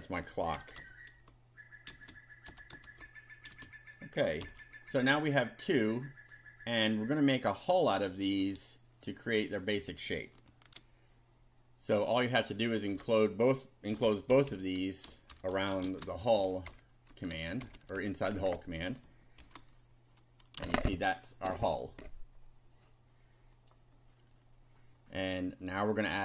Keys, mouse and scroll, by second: 0.0-2.9 typing, 4.4 F5, 5.7 click, 10.7 ctrl+r, 12.2 click, 12.9 Return, 13.7-16.4 typing, 16.4 shift+Down, 16.7 shift+Home, 17.1 shift+Tab, 17.3 shift+Down, 17.6 shift+Home, 17.7 shift+Tab, 18.0 shift+End, 18.3 shift+Return, 19.4 shift+], 20.6 F5, 23.6 click.